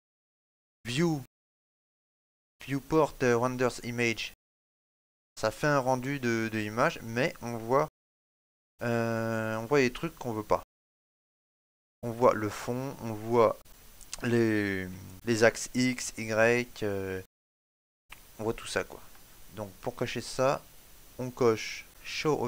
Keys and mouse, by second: 0.2 click, 14.2 middle click, 14.9 ctrl+middle click, 15.1 middle click, 18.5 ctrl+middle click.